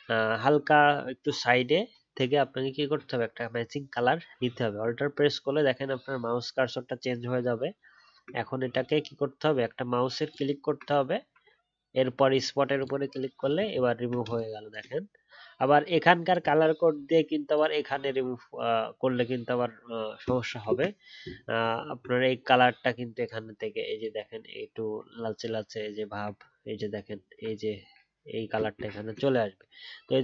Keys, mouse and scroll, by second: 10.2 alt+click, 13.7-14.5 alt+scroll down 1, 16.2 alt+scroll down 1, 16.2 alt+click, 21.7 alt+scroll up 1, 26.3-26.7 alt+scroll up 1, 26.7-27.0 alt+scroll down 1, 29.3 ctrl+z.